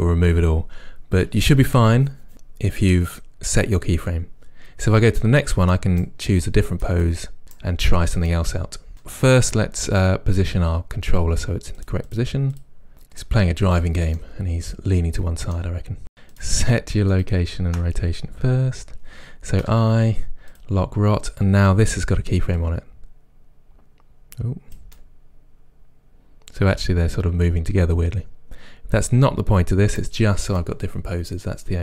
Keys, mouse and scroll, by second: 5.8 right click, 6.4 click, 7.1-8.9 right drag, 8.3 middle click, 9.1 right click, 11.8 click, 12.6 click, 12.9 middle drag, 13.2-13.8 middle drag, 13.6 r, 13.8 g, 14.0 click, 14.1 r, 14.3 g, 14.5 click, 14.6-15.9 middle drag, 16.3-17.3 drag, 19.6 i, 22.6 click, 24.4 click, 25.1-30.6 right drag, 30.6-31.8 middle drag.